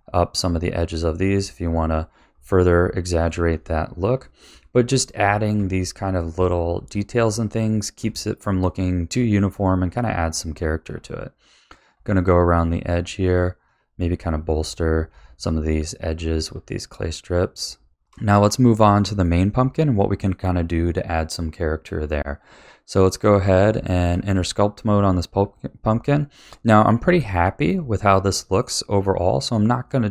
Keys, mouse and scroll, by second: 0.0 click, 0.3-1.3 middle drag, 1.3 click, 1.7 click, 2.2 middle click, 3.1 click, 3.5 click, 4.1 click, 4.5 click, 5.2 click, 5.6 click, 6.1 click, 6.7 middle click, 7.6 click, 8.0 click, 8.4 middle click, 9.1 click, 9.4 click, 10.0 click, 10.4 click, 10.9-12.6 middle drag, 13.2 click, 13.6 click, 14.2 click, 14.5 click, 15.0 middle click, 15.9 click, 16.2 click, 16.5 click, 17.1 middle click, 18.0 click, 18.0-18.9 shift+scroll down 4, 18.9-21.9 shift+middle drag, 23.1 click, 23.8-24.3 shift+middle drag, 24.3 Tab, 26.4-30.1 middle drag.